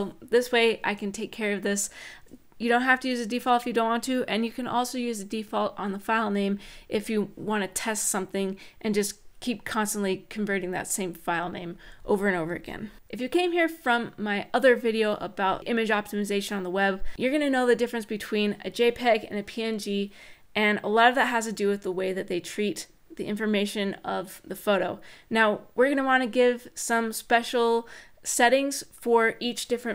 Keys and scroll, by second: 11.6 Tab, 12.4 Tab, 12.8 shift+;.